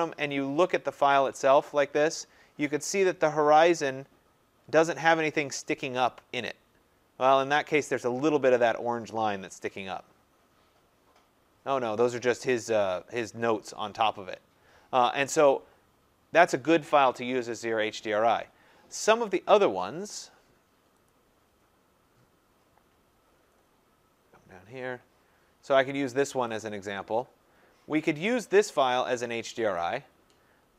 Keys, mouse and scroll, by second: 1.3 click, 21.1 click, 23.2-23.7 scroll, 24.2 scroll, 26.6 click, 29.8 click.